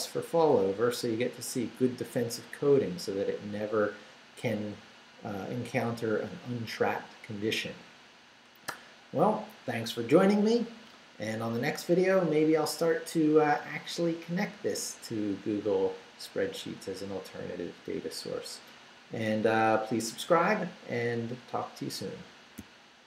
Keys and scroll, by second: 0.1 Up, 0.5 Down, 1.9 Down.